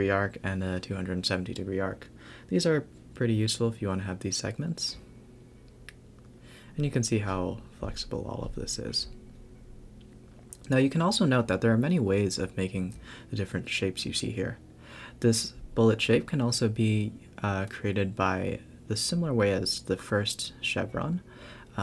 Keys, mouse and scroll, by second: 0.1-0.6 scroll up 2, 0.6 Tab, 0.7 Tab, 1.2 click, 1.4 shift+d, 2.5-2.8 scroll down 4, 2.8 click, 3.0 shift+click, 3.6 shift+click, 3.7 g, 4.6 click, 4.9 shift+d, 5.6 click, 6.0 shift+click, 6.1-8.2 typing, 6.7 click, 6.8 Tab, 7.0 scroll up 3, 9.2 Tab, 9.3-10.9 scroll down 6, 9.8 a, 9.9 a, 10.9 scroll down 2, 13.7-14.2 scroll up 1, 14.2 drag, 14.9-15.7 scroll up 1, 15.7 click, 15.9 shift+d, 17.2 Tab, 17.4 scroll up 1, 17.7 ctrl+r, 18.2 click, 18.4 g, 18.9 Tab, 19.1-20.0 scroll down 2, 20.0 click, 20.5-21.8 typing.